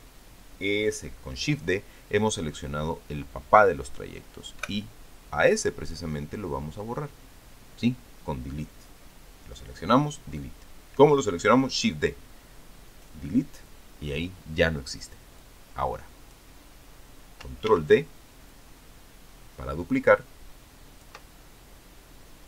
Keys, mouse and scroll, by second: 5.4 Delete, 16.2-17.4 drag, 18.5 ctrl+d, 19.3-22.1 ctrl+drag.